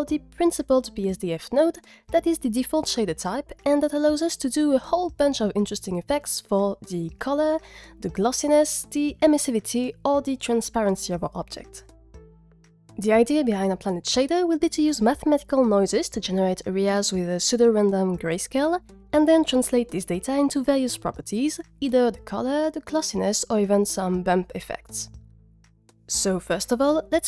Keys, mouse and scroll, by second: 0.1 g, 26.2-27.2 middle drag.